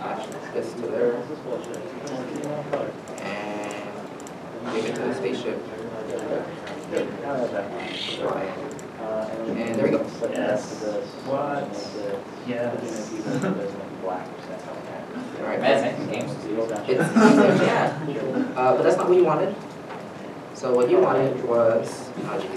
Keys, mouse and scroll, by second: 0.5 Return, 4.8 Return, 10.0-10.4 scroll down 1, 10.4 right click, 11.4 s, 12.0 right click, 12.1 s, 14.6 right click, 19.7 right click, 19.8 alt+Tab.